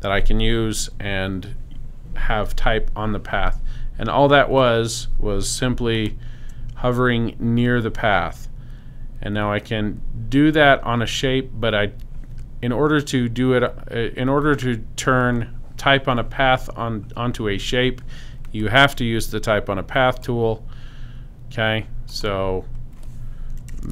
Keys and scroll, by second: 23.4-23.9 typing.